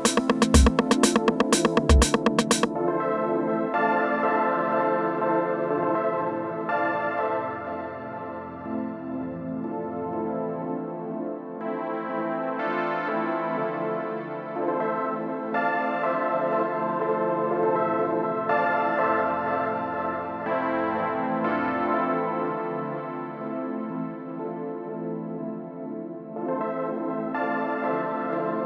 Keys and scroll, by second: 12.9 space, 24.3 super+s, 25.0 Return.